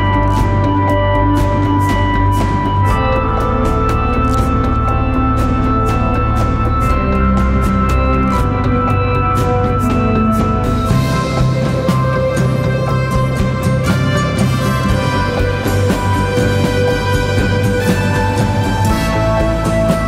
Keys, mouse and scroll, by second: 4.1 ctrl+t, 5.4 alt+shift+click, 10.4 alt+shift+click, 12.1 Return.